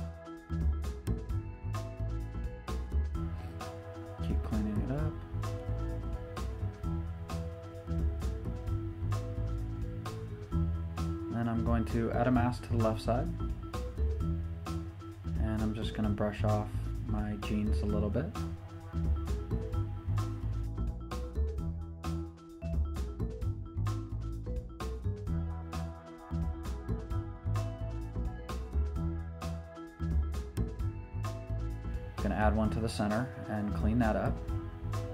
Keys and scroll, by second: 14.0 b, 21.4-21.8 typing, 29.1 ], 29.2 ], 34.9 [, 34.9 [.